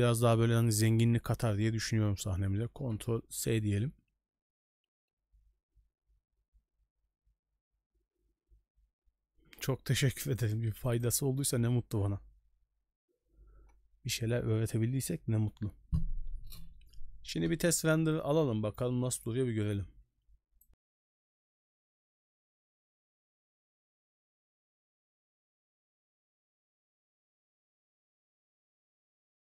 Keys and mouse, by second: 0.8 shift+middle drag, 3.5 ctrl+s, 10.2-11.1 drag.